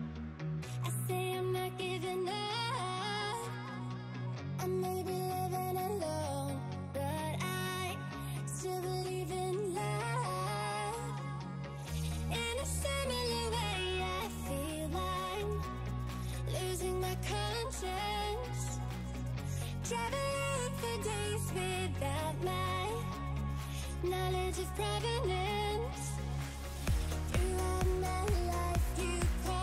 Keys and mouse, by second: 0.1 click, 2.7 click, 3.3 Delete, 4.2 click, 7.3 click, 9.7 click, 13.0 click, 13.6 space, 13.6 click, 15.2 click, 16.7 click, 17.3 click, 17.5 click, 17.8 click, 18.2 click, 18.4 click, 18.6 click, 19.1 click, 19.4 click, 19.6 click, 19.9 click, 20.5 click, 20.8 click, 21.1 click, 21.6 click, 21.9 click, 22.1 click, 22.4 click, 22.5 click, 22.8 click, 24.0 click, 24.2 click, 24.3 click, 26.9 click, 27.3 click, 28.8 click.